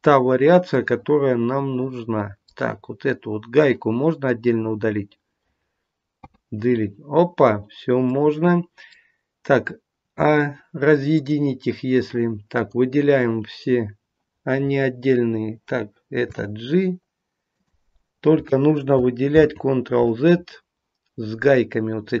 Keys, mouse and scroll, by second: 0.7 middle click, 2.7-3.6 scroll up 2, 3.6 click, 3.6 scroll up 2, 4.9-5.9 scroll down 1, 5.9 scroll down 3, 6.1 Delete, 8.1 middle click, 11.1 click, 12.6 click, 14.6-15.6 scroll down 1, 15.6-16.3 scroll down 3, 16.3 g, 19.3 ctrl+z, 20.2-22.2 scroll up 1.